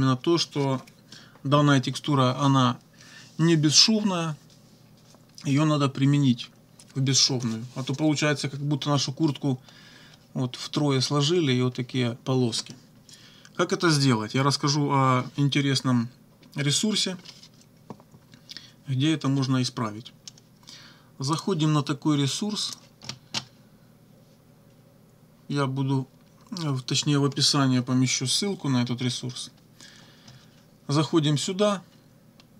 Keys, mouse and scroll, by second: 21.4 click, 22.6 click.